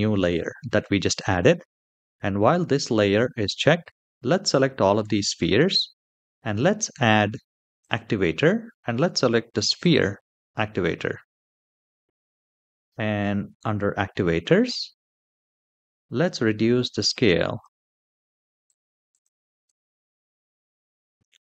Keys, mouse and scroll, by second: 3.5-4.7 drag, 7.5-10.6 drag, 11.9-13.8 scroll down 4, 13.8-15.6 scroll down 3, 15.6-17.4 drag, 15.6 scroll down 1, 18.4 click, 18.8 click, 19.4 click, 20.3-21.5 scroll up 3.